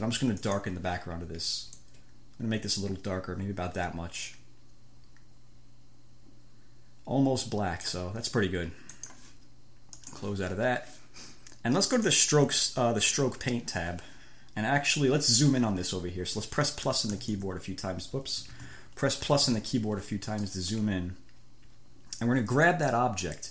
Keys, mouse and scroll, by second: 0.7 click, 2.0-5.4 drag, 17.1 =, 17.7 BackSpace, 18.8 ctrl+z, 19.6 =, 20.7 middle click, 22.9 middle click.